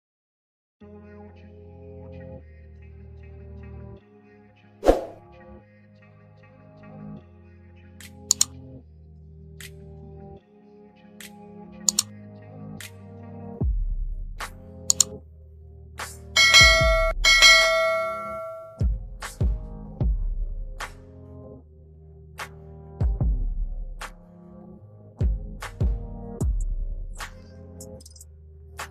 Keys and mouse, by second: 3.3-4.5 drag, 4.9 click, 5.7 click, 7.4-9.4 drag, 9.6-10.3 drag, 11.4-12.9 drag, 16.8 Left, 17.3 Down, 17.7 Down, 18.1 Right, 18.9 Up, 20.4 click, 21.2 click, 21.8 Up, 22.0 Up, 22.3 Up, 22.6 Down, 22.7 Down, 22.9 Down, 23.3 Down, 23.4 Down, 23.5 Down, 23.7 Down, 23.9 Down, 25.4 ctrl+h, 28.2 click.